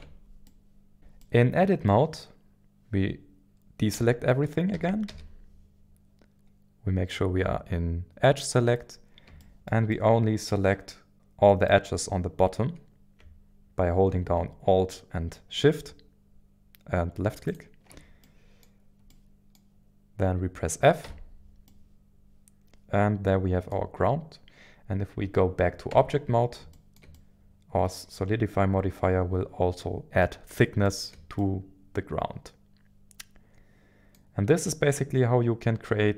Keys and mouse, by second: 0.0 Tab, 0.4 middle click, 1.2-3.9 middle drag, 3.9 a, 4.7 a, 8.2 click, 8.2 a, 9.7 shift+middle click, 9.9-11.1 middle drag, 11.7 middle click, 18.2-19.5 middle drag, 21.0 f, 21.6-24.1 middle drag, 25.9 Tab, 26.7 shift+middle click, 27.1-30.2 middle drag, 30.9 shift+middle click, 31.4-34.2 middle drag, 34.7-36.1 middle drag.